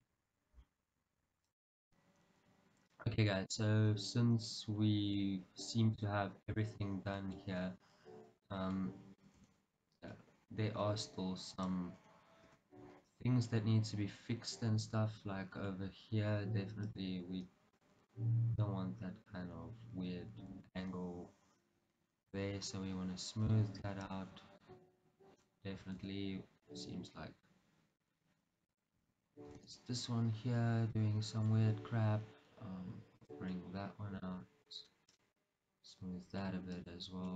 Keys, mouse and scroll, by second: 2.9-3.4 scroll down 2, 4.8-5.3 scroll up 2, 6.8 scroll up 1, 7.6 scroll up 1, 8.5 click, 8.8-11.6 middle drag, 9.6 Tab, 11.6 click, 12.5 KP_Decimal, 13.2 scroll down 1, 13.6-17.8 middle drag, 17.2 click, 17.8 click, 18.2-22.4 middle drag, 20.9 g, 22.4 click, 22.8-24.1 middle drag, 24.1 click, 24.7-26.0 middle drag, 26.0 shift+z, 26.7-28.8 middle drag, 28.8 click, 29.7 shift+z, 29.9-33.3 middle drag, 31.6 g, 33.3 click, 33.6-35.3 middle drag, 33.8 click, 34.6 g, 35.3 click, 35.4-36.9 middle drag, 36.9 click.